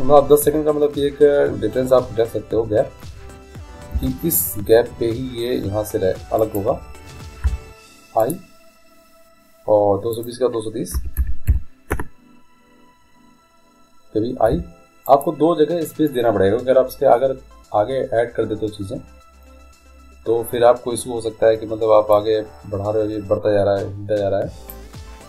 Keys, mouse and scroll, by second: 4.0 g, 7.6 i, 10.2-12.1 drag, 14.6 i, 22.2-24.1 drag.